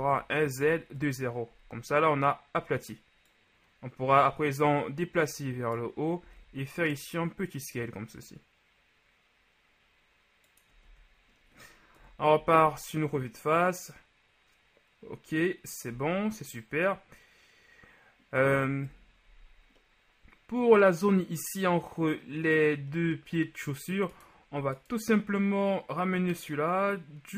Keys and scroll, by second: 0.0 s, 0.0 z, 0.7 KP_0, 1.0 Return, 3.0 typing, 6.3 s, 10.9 shift+z, 12.0 KP_1, 12.4 z, 16.0 z, 19.0 KP_1.